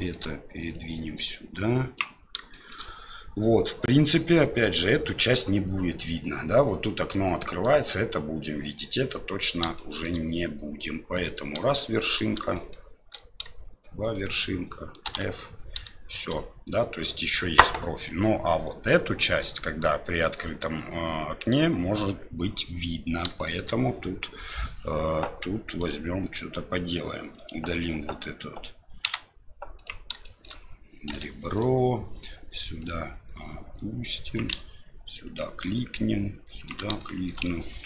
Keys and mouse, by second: 0.8-2.2 drag, 2.7 shift+middle click, 9.8 shift+middle click, 11.1 right click, 12.5 shift+middle click, 14.0 shift+right click, 15.0 f, 23.4 shift+middle click, 25.6 right click, 27.6 right click, 27.6 2, 29.0 x, 30.2 shift+middle click, 31.1 1, 31.5 right click, 32.8-34.5 drag, 36.6 ctrl+click, 37.0 shift+middle click.